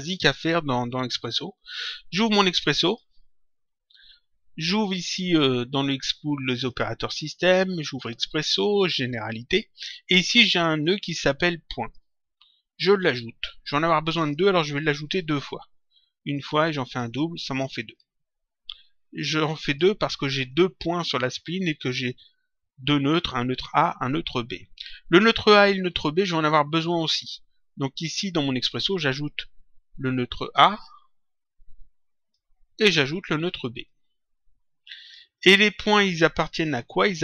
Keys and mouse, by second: 0.0 click, 2.6 click, 6.6 click, 8.0 click, 9.3 click, 11.8 click, 13.0 click, 16.3 ctrl+click, 17.8 click, 20.4 click, 27.1 click, 30.4 click, 33.8 click, 35.9 click.